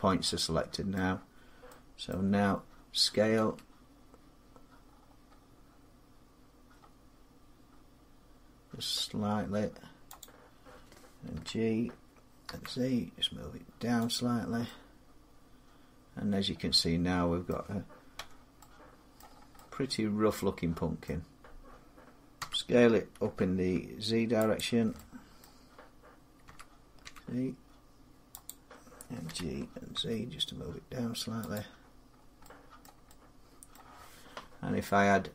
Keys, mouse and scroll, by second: 0.7 middle click, 1.9-5.7 middle click, 3.2 s, 4.6-5.3 scroll down 8, 8.4 scroll, 10.0 click, 11.1 g, 12.3 z, 13.9 click, 15.7 click, 15.9 click, 16.4 click, 16.6 click, 17.2 middle click, 17.9 Tab, 18.9 middle click, 19.0 middle click, 19.1 middle click, 20.8 middle click, 22.2 s, 23.0 z, 23.9 scroll down 3, 24.0 scroll, 24.3 click, 25.2 middle click, 26.2 s, 26.8 s, 28.2 click, 29.1 g, 29.7 z, 30.5 s, 30.5 g, 31.3 click, 31.9 scroll up 3, 32.6 middle click, 33.5 middle click, 34.9-35.3 scroll down 3.